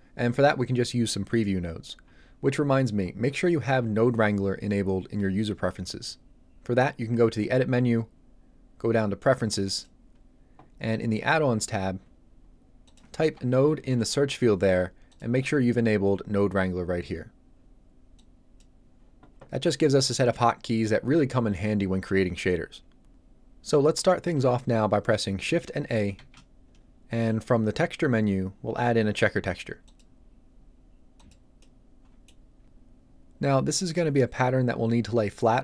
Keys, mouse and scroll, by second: 7.4 click, 12.8 click, 13.6 n, 13.8 o, 13.9 e, 15.1 click, 26.1 shift+a, 29.8 click, 29.9 click, 31.6 middle click.